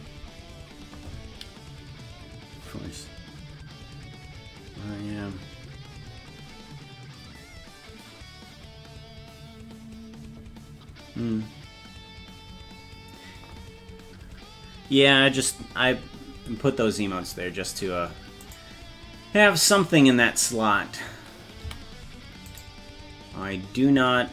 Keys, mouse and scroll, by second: 18.5 right click, 21.7 a, 22.6 right click.